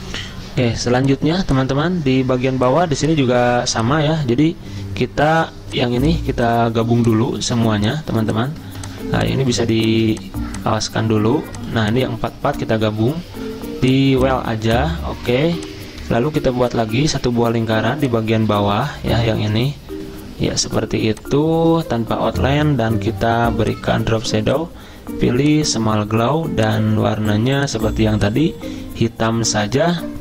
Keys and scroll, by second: 8.7 ctrl+z, 12.4 ctrl+z.